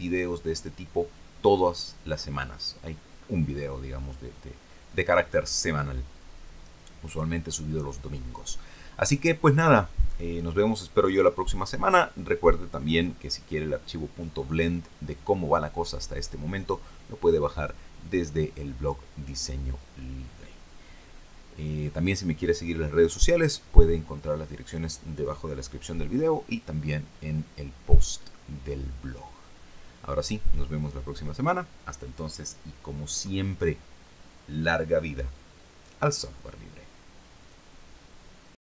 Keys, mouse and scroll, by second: 36.9 click, 38.5 click.